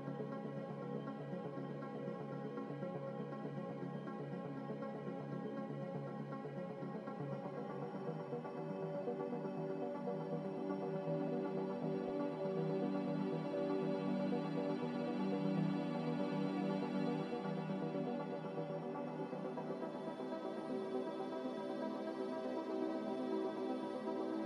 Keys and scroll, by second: 0.0 z.